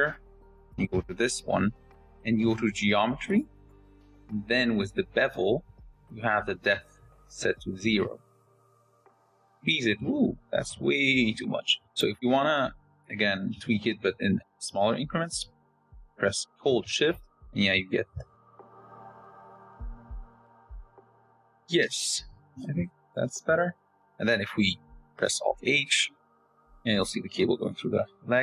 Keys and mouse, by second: 2.4 click, 8.8-11.7 drag, 13.7-21.3 shift+drag, 22.4-24.6 shift+drag, 26.4 alt+h.